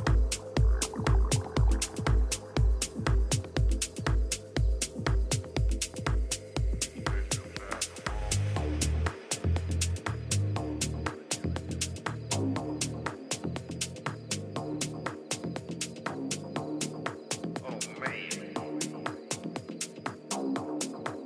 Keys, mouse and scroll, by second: 0.4 e, 12.0 g, 17.1 a, 18.2-21.0 drag, 18.8 a, 19.1 a, 19.9 b.